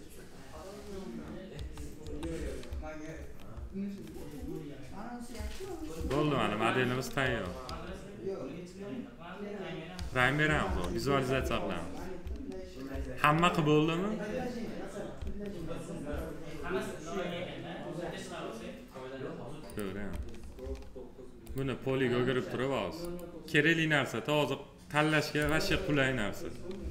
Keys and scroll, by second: 1.3 F4, 7.0 F4, 9.7 F4.